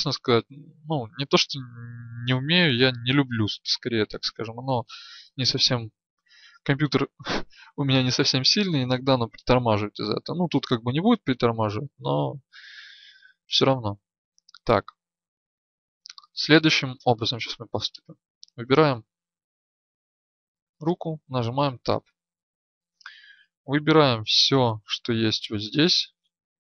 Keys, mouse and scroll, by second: 18.0 right click, 20.8 Tab, 25.5 a.